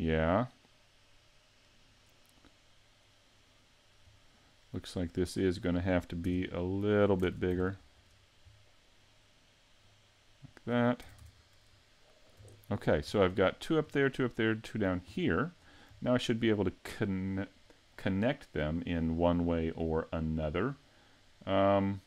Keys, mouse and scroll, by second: 0.2 middle click, 0.7 scroll down 2, 4.2 middle click, 5.5 right click, 6.3 Tab, 7.2 ctrl+Tab, 8.0 right click, 8.5 middle click, 9.8 click, 11.1 a, 11.2 Tab, 11.4 scroll down 3, 11.8 middle click, 12.6 shift+middle click, 13.1-13.5 scroll down 2, 13.5 shift+middle click, 15.6 scroll up 4, 16.0 shift+middle click, 20.9 middle click, 21.6 middle click.